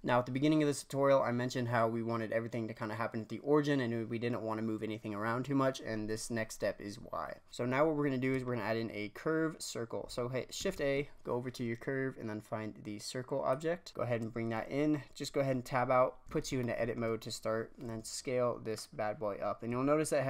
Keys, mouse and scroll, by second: 7.5 click, 10.5 shift+a, 16.2 Tab, 16.5-17.8 shift+middle drag, 17.8 s, 19.7 s.